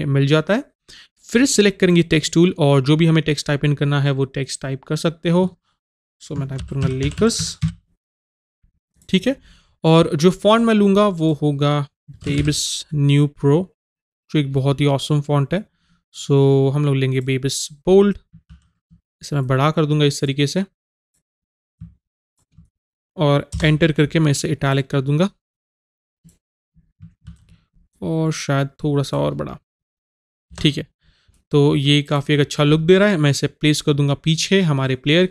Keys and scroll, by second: 6.4 Caps_Lock, 23.6 Return, 30.6 Return.